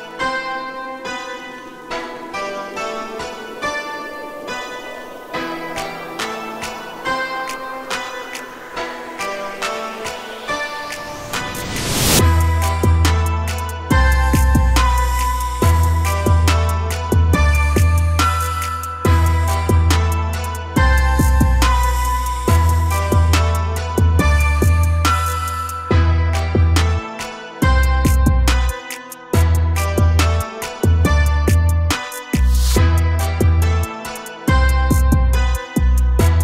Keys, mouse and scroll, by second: 0.1 click, 5.2 click, 7.8-9.5 drag, 9.5-10.2 scroll up 1, 10.2-12.2 drag, 12.2-12.8 middle drag, 12.8-13.7 scroll up 1, 13.7 click, 17.6-18.9 drag, 22.9-23.7 drag, 26.8-28.5 drag, 33.3-35.9 drag, 35.9 Tab.